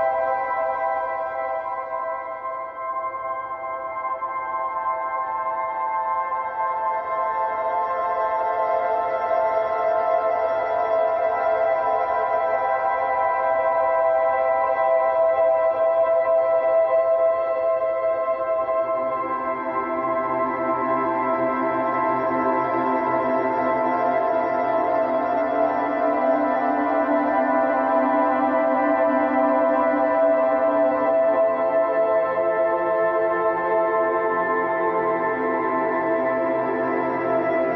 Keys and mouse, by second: 2.0 ctrl+z, 3.6 ctrl+z, 4.0 ctrl+z, 4.1 ctrl+z, 4.5 ctrl+z, 6.1 ctrl+z, 7.3 ctrl+z, 7.4 ctrl+z, 7.5 right click, 7.7 ctrl+z, 7.9 ctrl+z, 8.3 ctrl+z, 9.3 ctrl+z, 9.5 ctrl+z, 9.6 ctrl+z, 10.4 ctrl+z, 10.9 ctrl+z, 12.0 ctrl+z, 12.3 ctrl+z, 12.6 ctrl+z, 13.0 ctrl+z, 13.7 ctrl+z, 14.0 ctrl+z, 14.2 ctrl+z, 14.4 ctrl+z, 15.2 ctrl+z, 15.5 ctrl+z, 17.7 ctrl+z, 18.1 ctrl+z, 18.3 ctrl+z, 18.8 ctrl+z, 22.1 ctrl+z, 22.6 ctrl+z, 23.9 right click, 27.4 ctrl+z, 29.1 right click, 32.1 ctrl+z, 32.5 ctrl+z, 33.3 ctrl+z, 34.0 ctrl+z, 35.1 ctrl+z, 35.4 ctrl+z, 35.5 ctrl+z, 36.1 ctrl+z, 37.4 ctrl+z.